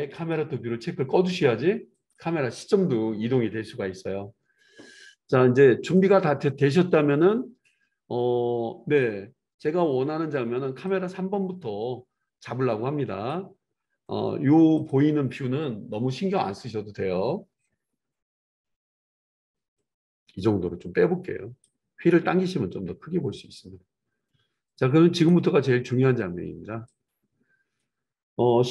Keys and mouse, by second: 0.1 click, 0.2-1.9 middle drag, 1.1 n, 1.9 click, 2.1-6.0 middle drag, 6.0-15.0 drag, 15.0-19.8 middle drag, 16.3 KP_7, 19.8-21.6 drag, 25.6-28.7 drag.